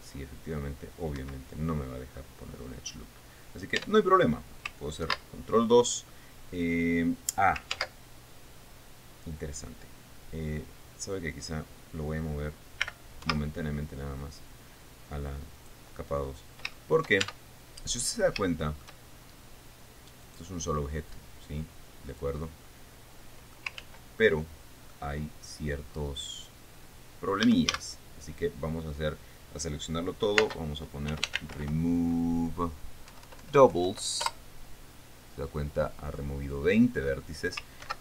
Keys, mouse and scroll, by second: 1.8 Escape, 4.4 Tab, 5.6 ctrl+2, 8.3 ctrl+z, 13.4 m, 13.8 2, 16.2 click, 16.8 scroll up 2, 17.3 shift+middle click, 17.8 shift+Tab, 18.6 scroll up 2, 19.0 shift+middle click, 20.8 right click, 21.7-23.0 drag, 23.0-24.3 middle drag, 24.4 ctrl+z, 24.8 ctrl+middle click, 25.8 scroll up 2, 26.2-26.7 scroll down 2, 28.0 a, 31.0-32.6 typing, 33.6 Down, 34.8 Return, 37.2-37.6 scroll up 2.